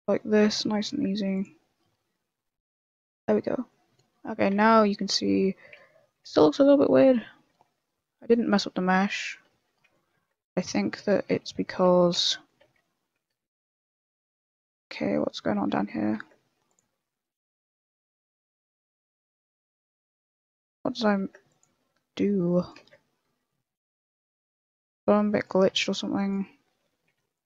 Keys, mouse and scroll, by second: 0.4 ctrl+z, 0.8 ctrl+r, 3.0 a, 3.2 Tab, 3.4 middle click, 3.8 scroll down 2, 4.2 middle click, 4.5 z, 4.8 middle click, 5.5 scroll up 1, 5.7 Tab, 5.9 middle click, 6.3 z, 6.5 middle click, 6.9 middle click, 7.5 Tab, 7.7 middle click, 8.5 scroll up 1, 8.6 middle click, 9.5 Tab, 9.7 middle click, 10.1 ctrl+r, 11.1 ctrl+z, 11.3 middle click, 11.6 shift+middle click, 11.9 middle click, 12.1 Tab, 12.2 middle click, 12.6 z, 12.8 middle click, 13.3 Tab, 13.7 middle click, 13.9 Tab, 14.0 scroll up 1, 14.1 middle click, 14.4 shift+middle click, 14.7 scroll up 1, 14.9 Tab, 15.2 middle click, 15.2 scroll up 1, 15.5 Tab, 15.9 Tab, 16.1 ctrl+r, 17.9 ctrl+z, 18.2 ctrl+r, 19.2 ctrl+z, 19.5 ctrl+r, 20.5 ctrl+z, 20.5 middle click, 21.2 ctrl+r, 22.8 ctrl+z, 22.9 middle click, 23.6 middle click, 24.2 alt+right click, 24.7 middle click, 25.0 a, 25.3 right click, 25.7 g, 27.0 a, 27.3 click.